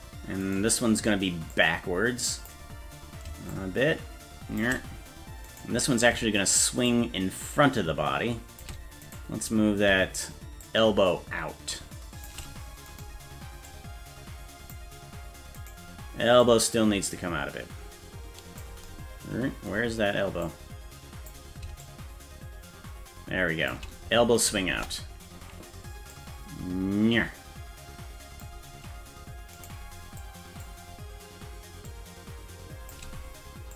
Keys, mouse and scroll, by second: 0.5 right click, 1.5-2.5 drag, 3.5-4.7 shift+drag, 5.6 right click, 6.9-8.7 shift+drag, 9.2 right click, 10.7-12.3 shift+drag, 13.0 right click, 13.7-14.8 drag, 15.7 right click, 16.5-18.7 drag, 20.5 click, 21.9-23.8 shift+drag, 24.8 KP_0, 26.2-28.5 drag, 29.7 right click, 30.2 click, 31.9-33.0 drag.